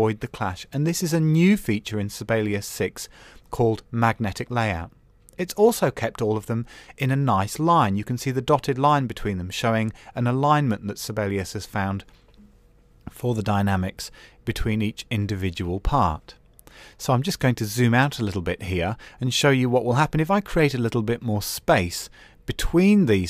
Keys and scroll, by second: 15.6 super+-.